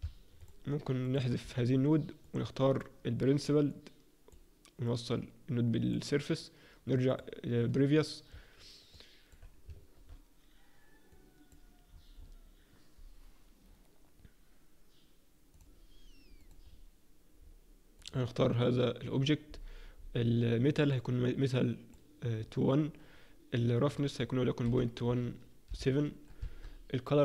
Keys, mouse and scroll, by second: 7.2 click, 8.9 alt+middle click, 11.2 click, 15.6-16.0 scroll up 6, 16.4 click, 16.6-17.4 scroll down 3, 17.4-18.0 scroll down 2, 18.0 click, 18.0-18.4 scroll down 1, 19.4-21.4 scroll up 4, 21.4 click, 21.4 scroll up 6, 24.0 click.